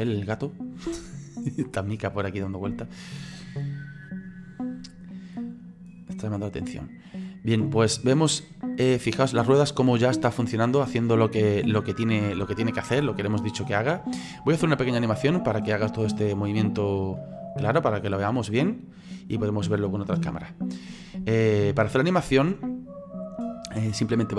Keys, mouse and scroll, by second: 1.0-1.4 scroll down 3, 1.4-2.1 scroll up 3, 2.1-4.7 middle drag, 4.7-5.1 scroll down 1, 5.1-6.1 middle drag, 6.1-6.8 scroll down 1, 6.8-10.2 drag, 10.2-10.7 scroll up 3, 10.7-13.1 middle drag, 13.1 scroll down 4, 15.6-20.9 drag, 21.8 click.